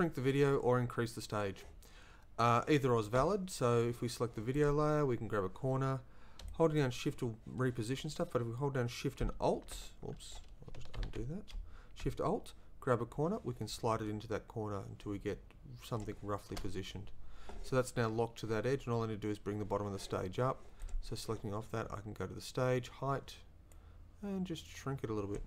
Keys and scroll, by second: 11.0 ctrl+z, 11.6 shift+z.